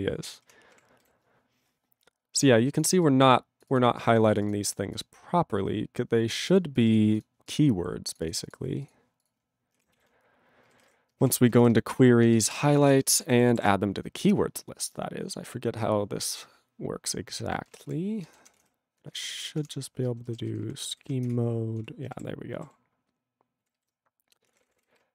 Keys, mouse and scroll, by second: 8.8 click, 8.9 click, 9.2 click, 9.2 click, 10.6 ctrl+g, 12.5 ctrl+Return, 12.9 alt+>, 13.3 ctrl+=, 13.6 ctrl+p, 14.1 ctrl+p, 16.4 ctrl+n, 16.9 ctrl+n, 17.4 ctrl+e, 17.6 ctrl+n, 17.7 ctrl+a, 17.9 ctrl+o, 18.2 ctrl+n, 18.4 ctrl+o, 18.5 Tab, 19.1 BackSpace, 19.6 shift+', 21.4 ctrl+Return, 21.8 Tab, 22.1 ctrl+=, 23.6 ctrl+e, 23.7 ctrl+b, 24.2-25.1 typing.